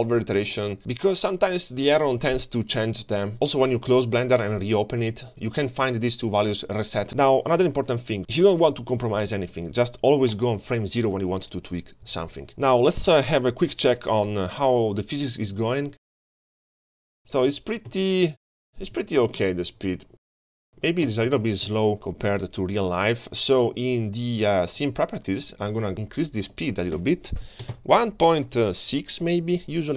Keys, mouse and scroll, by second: 7.1 ctrl+s, 7.1 click, 7.4-8.0 scroll down 2, 8.0 scroll up 2, 8.2 space, 10.3 click, 12.9-15.3 scroll down 4, 13.4-13.7 middle drag, 23.2 space, 23.6 space, 24.1 click, 24.5 click, 24.8 click, 26.5-28.6 drag.